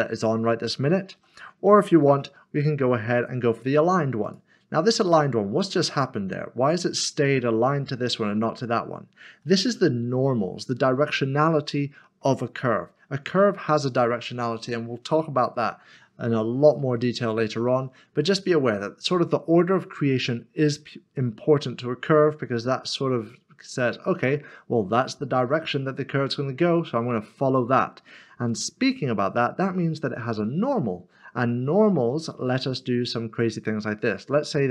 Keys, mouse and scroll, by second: 1.1 ctrl+z, 2.1 v, 11.5 middle click.